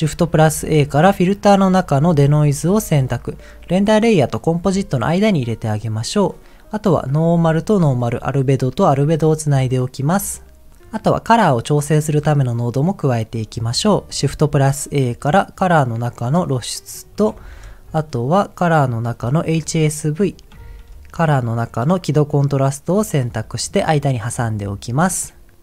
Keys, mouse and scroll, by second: 0.2 shift+a, 6.9-8.0 drag, 8.5-9.5 drag, 12.5-13.1 scroll down 2, 13.1 middle click, 14.3 shift+a, 17.4 shift+a, 20.6 shift+a, 23.4 middle click, 25.2-25.5 scroll down 1.